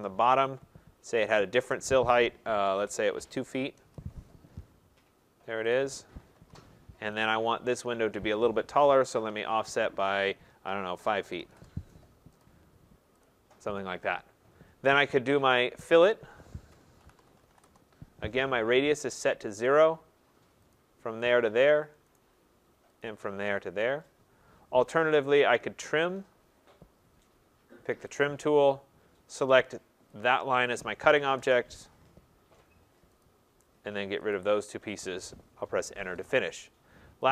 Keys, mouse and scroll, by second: 0.0 middle click, 2.7-3.4 typing, 3.8 Return, 5.7 click, 6.3 Return, 7.2 click, 8.8-9.6 typing, 10.7-11.5 typing, 12.4 click, 13.3 click, 16.6-17.6 typing, 20.7 click, 21.1-21.9 typing, 21.4 click, 22.2 right click, 23.1 click, 23.6 click, 28.2 click, 30.2 click, 31.4 Return, 33.2 click, 34.4 click, 35.6 Return.